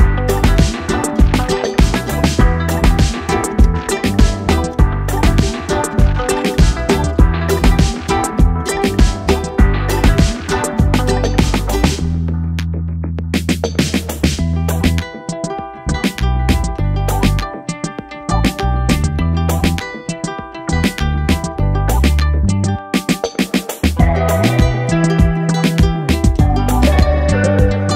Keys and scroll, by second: 0.0-4.7 typing, 13.7 ctrl+j, 23.6-27.1 typing.